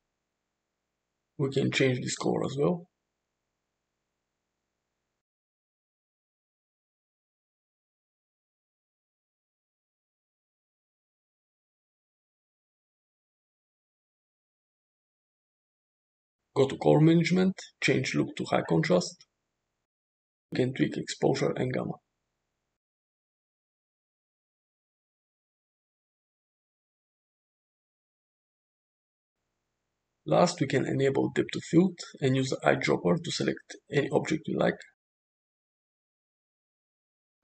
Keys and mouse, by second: 2.1 click, 9.5 click, 14.5 click, 16.6 click, 18.4-19.6 drag, 21.0-23.4 shift+drag, 24.2-26.0 shift+drag, 26.6-28.4 shift+drag, 30.8 click, 32.7 click.